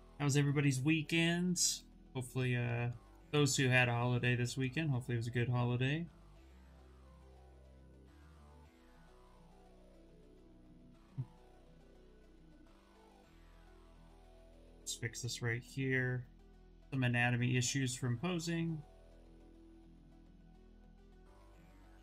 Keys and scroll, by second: 7.7 s.